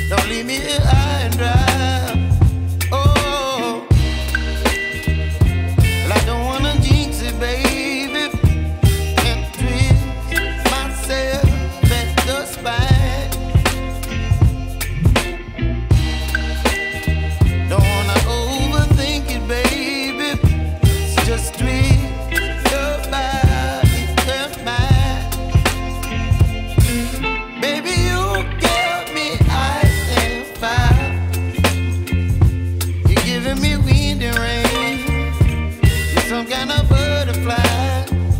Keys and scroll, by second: 4.3 ], 9.6 [, 13.2 space, 22.8 ctrl+t.